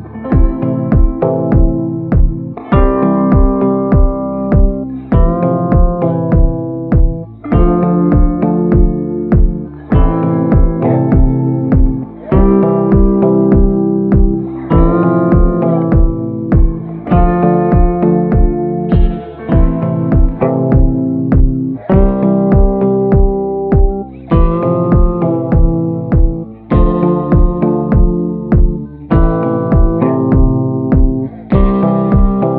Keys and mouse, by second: 0.0-3.1 typing, 3.7 middle click, 4.4 middle click, 5.1 shift+middle click, 5.6 shift+middle click, 6.0 middle click, 6.4 shift+middle click, 7.0 shift+middle click, 8.0 shift+middle click, 9.1 shift+b, 9.9 b, 11.2 b, 11.7 middle click, 12.3 middle click, 12.9-13.9 shift+middle drag, 14.0 middle click, 14.4 shift+middle click, 14.9 middle click, 15.3 shift+middle click, 16.2 middle click, 17.7 shift+middle click, 20.6 b, 24.1 b, 25.0 middle click, 26.5-28.1 middle drag, 29.1-30.3 middle drag, 30.3 click, 32.1 click.